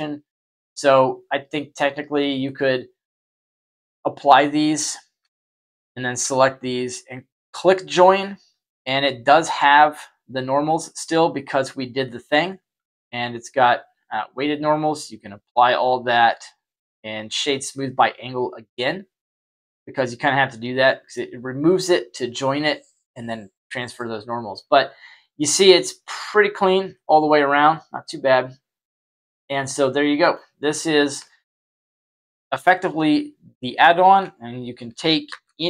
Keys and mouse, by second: 1.3-2.7 drag, 3.6 click, 5.2-5.5 right drag, 5.7 shift+right click, 6.9 click, 7.6-8.8 middle drag, 12.0 middle click, 13.6-14.4 drag, 15.8 q, 18.6-21.1 middle drag, 24.2-25.6 middle drag, 26.9-30.3 middle drag, 31.2-31.5 shift+middle drag, 31.7-32.5 middle drag, 33.7-34.1 shift+middle drag, 35.2 shift+a.